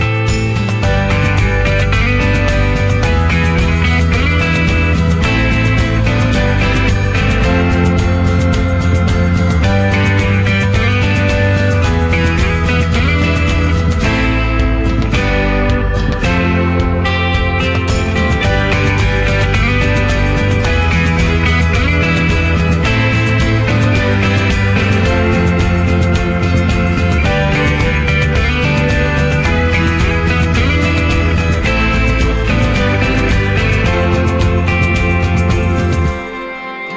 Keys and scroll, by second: 11.8 ctrl+0, 24.6 ctrl+0.